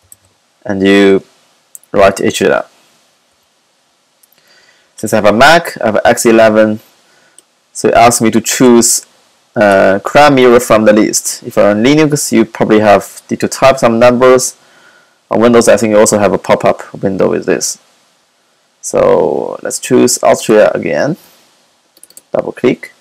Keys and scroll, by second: 0.0-0.6 typing.